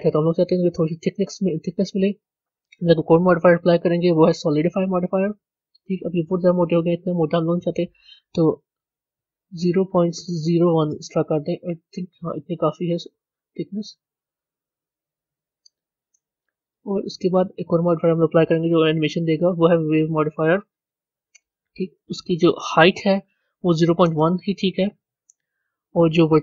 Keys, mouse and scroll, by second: 5.2-10.8 drag, 10.8 Left, 12.0-15.0 middle drag, 19.7-26.4 drag.